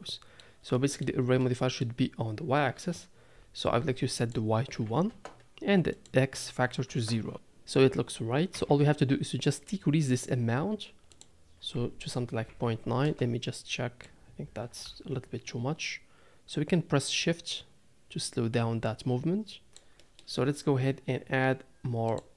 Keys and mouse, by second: 0.7 shift+middle drag, 1.4-1.8 middle drag, 4.3 click, 6.1 click, 8.5 KP_7, 11.3-13.0 drag, 14.2-19.7 drag, 19.7 z, 20.0 drag, 22.1 click.